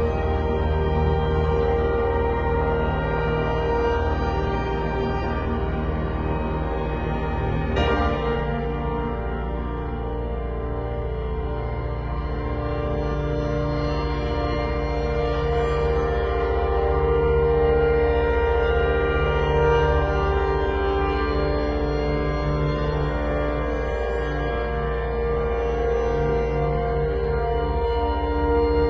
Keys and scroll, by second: 5.7 super+t, 12.3 super+t, 19.8 super+t, 24.4 shift+super+g, 25.5-28.2 typing.